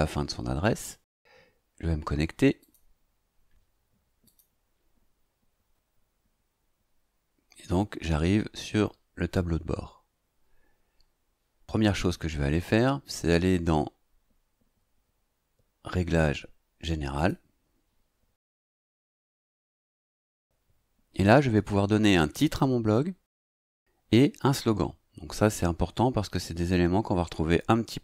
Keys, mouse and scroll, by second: 2.6 click, 4.2 click, 17.1 click.